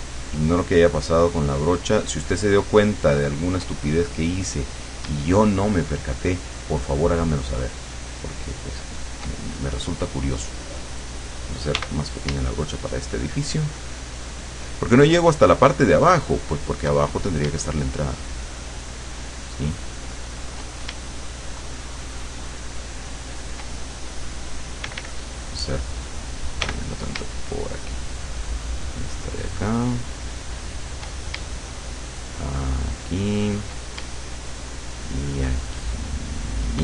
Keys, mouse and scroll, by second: 5.6-9.2 shift+drag, 11.8 d, 13.0-17.0 shift+drag, 18.1-20.7 shift+drag, 21.2-23.8 shift+drag, 24.9 d, 26.6 f, 28.0-31.2 shift+drag, 32.1-33.8 shift+drag, 34.4-36.7 shift+drag.